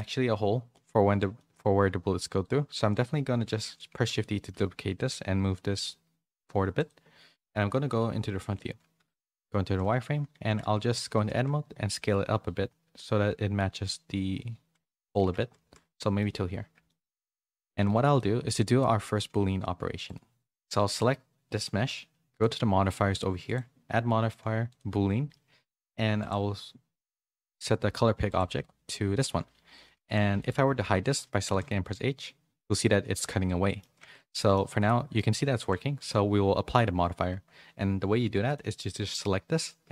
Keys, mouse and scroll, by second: 0.7 middle click, 1.3 middle click, 2.9 middle click, 3.5 shift+d, 7.9 KP_1, 9.3 z, 10.4 Tab, 11.0 a, 11.3 s, 15.2 Tab, 15.6 z, 15.9 middle click, 16.8 shift+middle click, 17.6 shift+middle click, 18.1 middle click, 19.0 g, 20.9 click, 22.3 click, 31.9 middle click, 32.8 middle click, 33.9 ctrl+z, 34.3 middle click, 35.9 click, 38.4 click.